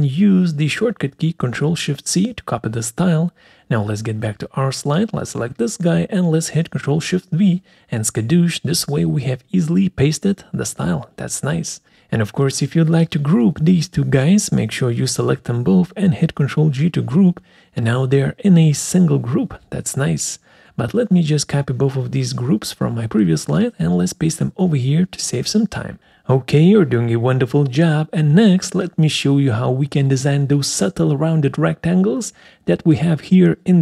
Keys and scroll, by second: 7.0 ctrl+shift+v, 12.3 ctrl+g, 15.7 ctrl+g, 19.1 Delete, 22.8 ctrl+c, 24.8 ctrl+v.